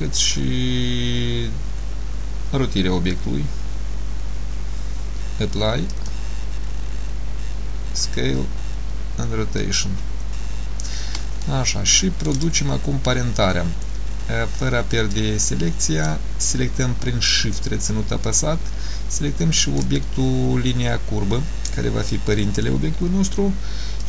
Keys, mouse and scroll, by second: 11.5 shift+middle click, 18.0 shift+click.